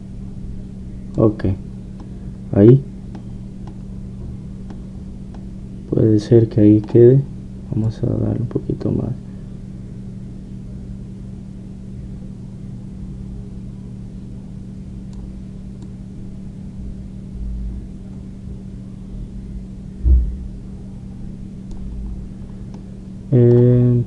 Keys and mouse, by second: 2.9-8.9 middle drag, 8.9-19.5 drag, 23.2-24.0 middle drag.